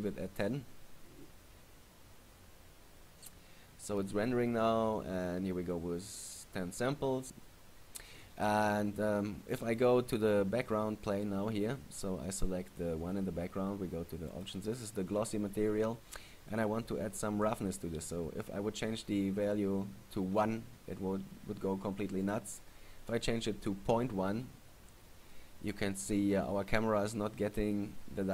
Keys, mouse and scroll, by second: 9.7 right click, 14.5 click, 22.4 click.